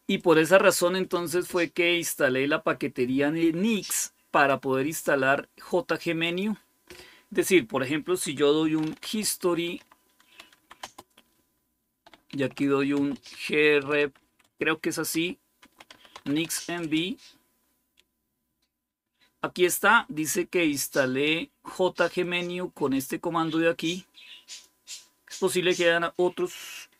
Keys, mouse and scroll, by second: 0.2-2.7 drag, 4.2-8.5 drag, 8.3-10.7 typing, 12.2-16.8 typing, 22.1-23.8 drag, 24.3 click.